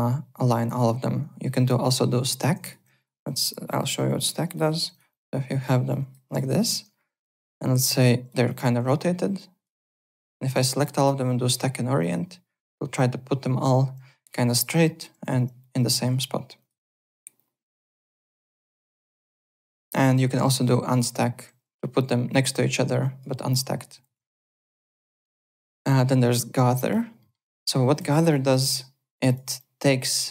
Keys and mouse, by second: 2.5-3.3 typing, 2.6 click, 3.0 click, 3.8 alt+q, 4.2 click, 4.4-7.4 typing, 4.9 click, 5.6 alt+q, 5.8 click, 7.2 click, 9.3 click, 9.8 3, 10.0 click, 12.0 click, 14.8 alt+middle click, 16.1 alt+Tab, 16.6 alt+click, 19.7 alt+Tab, 20.8 click, 23.0 click, 24.0 alt+Tab, 26.8 click, 27.2 middle click, 27.6-28.5 typing, 28.1 click, 28.1 click, 29.1 click.